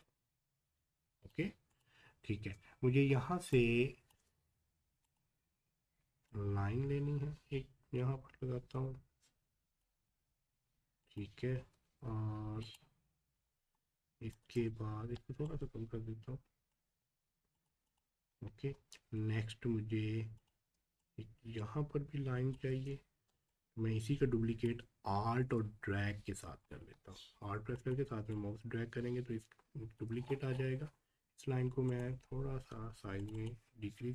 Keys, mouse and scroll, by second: 2.5 scroll up 1, 3.5 click, 3.9 space, 5.1-11.0 drag, 11.5 v, 12.6 click, 13.3-13.7 scroll down 1, 14.3 click, 14.6 scroll up 1, 15.5-17.5 shift+drag, 18.3 scroll down 1, 20.4 click, 21.0-23.5 alt+drag, 23.5-25.6 shift+drag, 25.6 scroll up 1, 27.7-30.2 shift+drag, 30.2 scroll down 1, 31.9-34.1 drag.